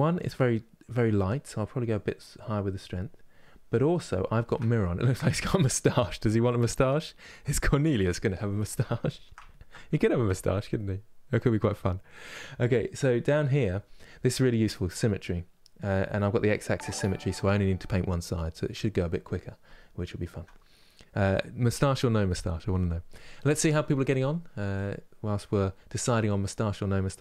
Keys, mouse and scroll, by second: 1.6-4.6 drag, 4.6-27.2 middle drag.